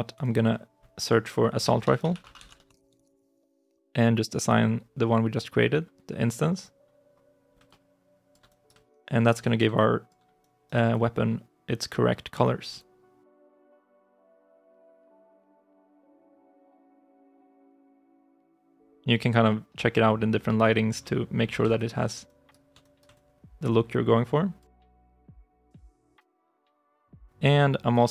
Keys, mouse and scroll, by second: 1.2-3.4 typing, 7.5 alt+click, 8.3 alt+right click, 8.7 alt+click, 9.3 right click, 9.5 right click, 9.6 alt+click, 10.2 right click, 10.8 alt+click, 12.3 right click, 12.6 alt+click, 15.5 alt+right click, 15.9 alt+click, 17.9 l, 21.6 alt+i, 22.1 alt+right click, 23.0 alt+click.